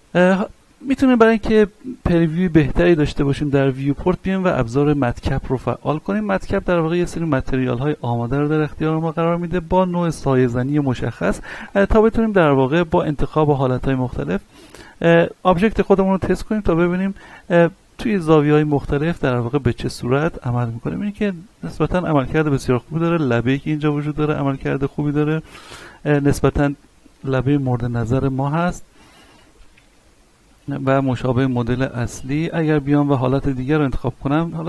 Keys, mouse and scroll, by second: 1.2-5.9 middle drag, 5.9 click, 6.6-7.6 scroll down 1, 7.6 click, 11.6 click, 12.2 middle click, 13.4 click, 14.6-24.4 middle drag, 24.4-26.5 middle drag, 26.5 middle click, 27.6-29.0 middle drag, 29.0 middle click, 29.7-30.0 scroll up 1, 30.0 middle click, 30.9-31.2 scroll down 1, 31.2 middle click, 32.4 click, 33.6 click, 33.9-34.6 middle drag.